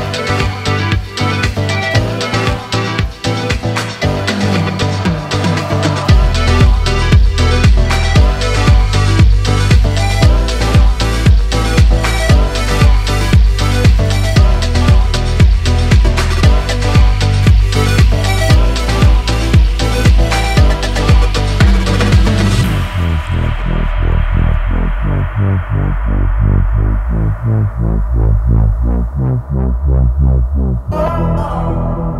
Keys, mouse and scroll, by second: 2.0 ctrl+b, 5.0 click, 5.4-6.6 middle drag, 6.6 alt+shift+click, 7.1 alt+shift+click, 8.3 ctrl+b, 12.1-13.3 shift+middle drag, 13.3 click, 13.7-14.1 scroll down 2, 14.1-17.4 middle drag, 17.4-18.1 typing, 19.7 click, 21.3-23.7 drag, 23.7-26.7 middle drag, 27.8 click, 29.8 alt+click, 30.7 alt+click, 31.4 click.